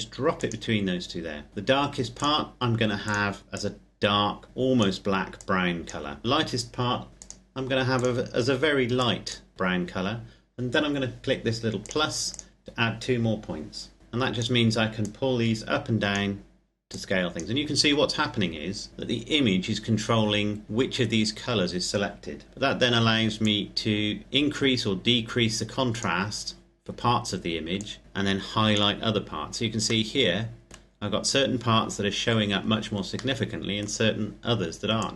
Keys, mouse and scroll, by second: 1.5-1.9 scroll up 2, 1.9 click, 7.1 click, 11.6 click, 18.7-20.0 scroll down 1, 21.1-23.3 scroll up 1, 23.3 click, 28.9-29.9 scroll down 1, 29.9 middle click, 33.1 middle click, 34.7 click.